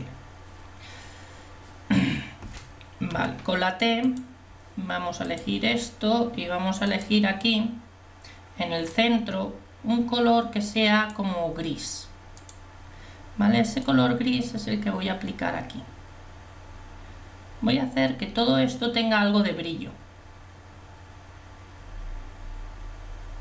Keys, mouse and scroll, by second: 3.1 t, 9.6-11.2 drag, 12.4 click, 14.4-15.6 drag.